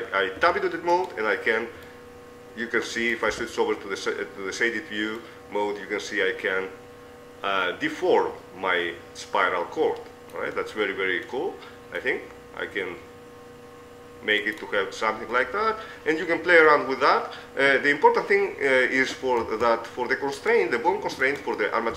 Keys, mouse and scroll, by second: 0.7 Tab, 1.3-2.4 right drag, 3.8 z, 7.6-10.4 middle drag, 11.0-14.2 middle drag, 15.8-16.8 middle drag, 17.4-20.8 middle drag, 20.0 Tab, 20.8-21.9 right drag.